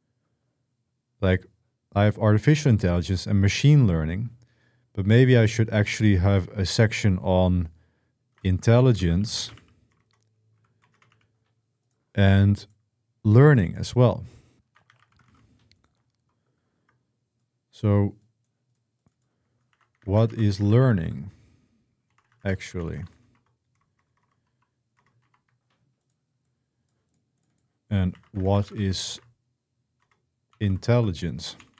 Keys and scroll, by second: 7.8-11.4 typing, 14.2-15.6 typing, 19.2-25.5 typing, 28.0-31.7 typing.